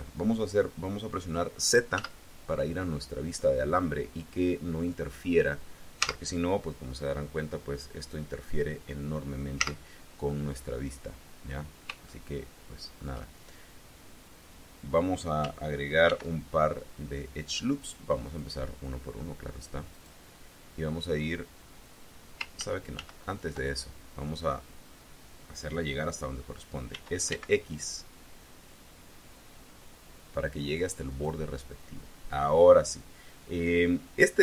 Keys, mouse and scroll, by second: 1.8 z, 2.9 scroll up 2, 5.9 z, 9.4 z, 11.1-11.5 scroll up 2, 11.9-13.0 shift+drag, 15.9 ctrl+r, 17.7 click, 18.1 click, 19.8 click, 22.5 ctrl+z, 26.8 s, 27.1 x, 31.0 click.